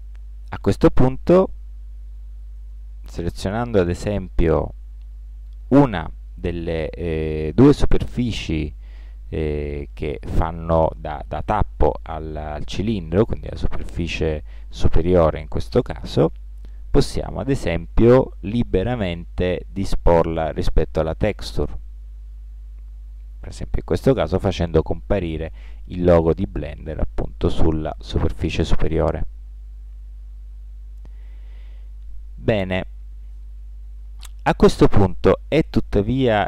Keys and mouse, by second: 4.7 click, 5.2 ctrl+l, 16.1 g, 22.9 middle click, 23.2 click, 24.9-26.6 middle drag, 28.5-29.9 middle drag.